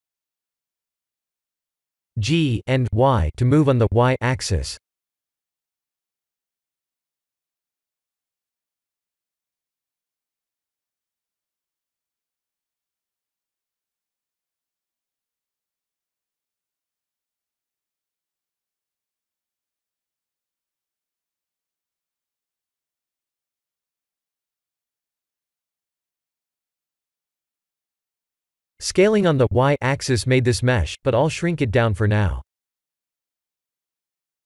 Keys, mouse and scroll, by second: 0.8 Tab, 1.5 KP_3, 1.8 Tab, 3.3 shift+z, 4.2 g, 8.3 s, 12.8 middle click, 15.2 middle click, 15.8 middle click, 16.3 KP_1, 16.5 KP_1, 22.8 shift+click, 27.7 middle click, 28.4 middle click, 28.8 middle click, 28.9 middle click, 29.4 middle click, 30.1 click, 30.5 middle click, 31.0 middle click, 32.0 middle click, 32.8 middle click, 34.2 s.